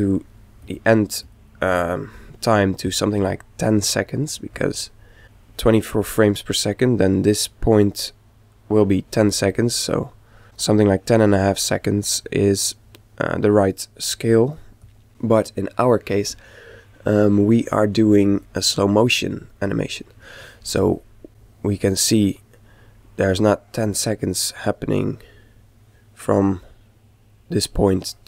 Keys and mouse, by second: 7.0 click, 12.2 click, 17.5-19.2 middle drag, 19.4-21.3 middle drag, 21.3 click.